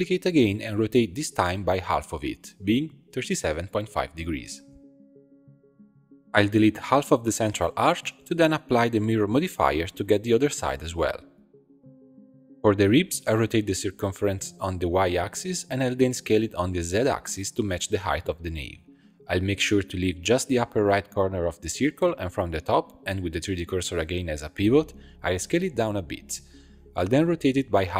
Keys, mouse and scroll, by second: 1.2 l, 2.2 shift+d, 4.1 r, 6.1 click, 6.8 ctrl+click, 7.7 x, 9.2 Tab, 10.5-12.5 drag, 12.5 middle click, 13.0 r, 15.4 s, 18.3 b, 19.5 b, 21.1 x, 22.4-23.9 drag, 23.9 s, 27.0 shift+middle click, 27.5 r.